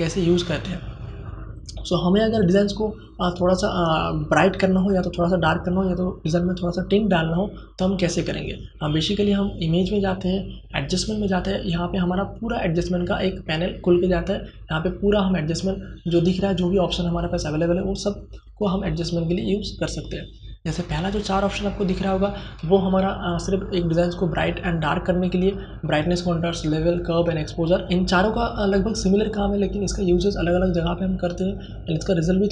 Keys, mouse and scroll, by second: 1.2 click, 9.2 click.